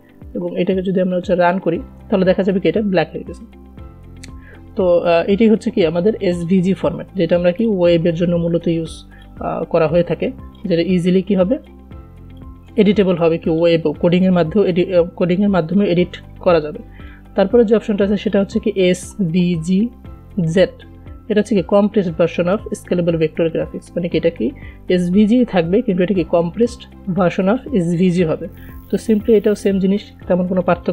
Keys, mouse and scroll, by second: 1.1 click, 6.7-13.8 drag, 17.3 click, 28.8 ctrl+Num_Lock, 29.5 ctrl+s.